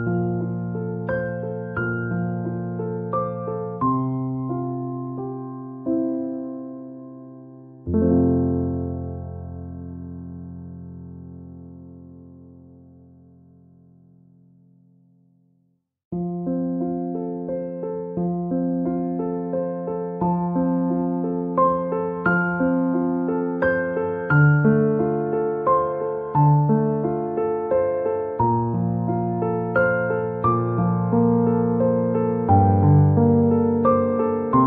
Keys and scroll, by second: 0.0-0.8 typing, 5.0 BackSpace, 5.8 a, 19.6 r, 32.9 Delete.